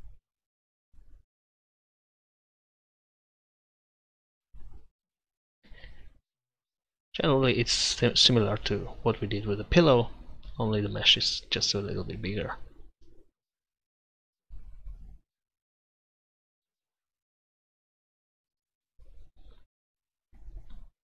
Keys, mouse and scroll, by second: 0.2 middle click, 0.4-1.6 middle drag, 1.6 click, 1.9-3.1 middle drag, 3.5-5.4 drag, 5.4-6.6 middle drag, 6.6-7.9 drag, 8.1 f, 9.1-10.6 drag, 13.0-20.8 drag, 18.7-21.0 middle drag, 18.7-20.8 right drag.